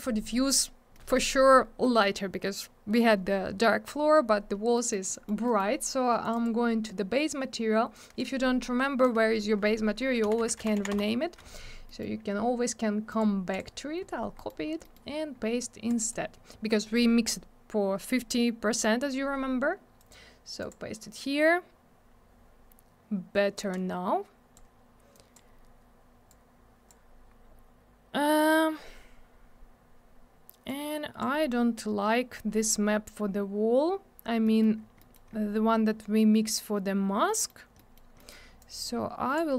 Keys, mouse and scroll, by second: 0.9 middle click, 1.3-1.8 scroll down 1, 1.8 middle click, 4.8 middle click, 5.1 middle click, 5.5 middle click, 5.6 double middle click, 5.7-6.0 scroll up 1, 6.2 click, 6.3 click, 6.4 click, 6.4 double click, 10.2 b, 10.9 Return, 11.9 middle click, 12.0 middle click, 12.2 scroll up 1, 13.1 right click, 13.2 right click, 13.5 click, 13.6 click, 14.4 middle click, 14.5 middle click, 14.6 scroll down 1, 14.8 middle click, 14.9 middle click, 15.1-15.9 scroll up 1, 15.9 click, 16.0 click, 16.0 click, 16.1 click, 20.0 right click, 20.1 right click, 20.6 click, 20.7 click, 23.6 click, 25.1 click, 26.3 click, 27.3-28.3 scroll up 1, 28.3-29.6 scroll down 1, 30.7 click, 31.7 scroll up 1, 32.5-33.1 scroll down 1, 34.5 middle click, 34.6 middle click, 34.8 scroll down 1, 35.0 middle click, 35.1 middle click, 35.3-35.6 scroll up 1, 37.3 middle click, 37.8 middle click, 38.0 middle click, 38.2 middle click, 38.3 double middle click, 38.6 click.